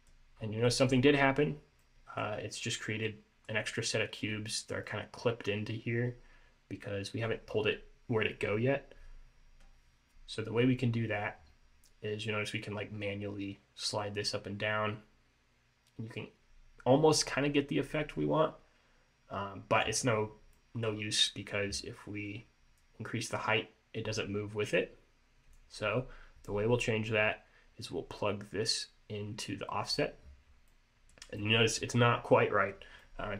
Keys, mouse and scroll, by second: 0.5 scroll up 2, 0.8 middle click, 1.2-1.6 scroll up 2, 1.6-1.9 scroll down 2, 1.9 middle click, 3.2 middle click, 4.4 scroll up 1, 5.0 middle click, 12.4 click, 20.2-20.7 scroll down 2, 20.7 middle click, 22.9 click, 27.3 scroll up 2, 28.7 click, 30.6 scroll down 1, 30.8 middle click, 31.5 middle click, 33.1 middle click.